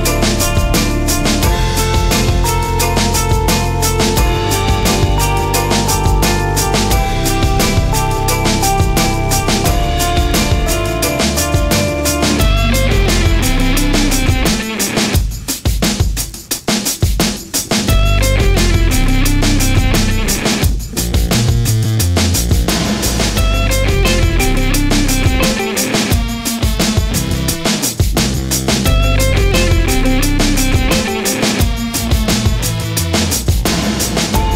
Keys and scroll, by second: 13.1 super+c, 15.2 super+f.